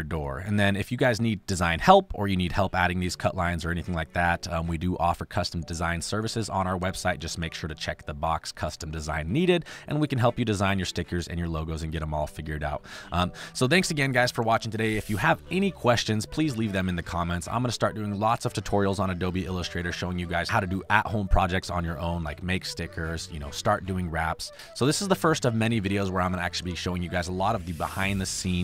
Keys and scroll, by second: 11.7 space.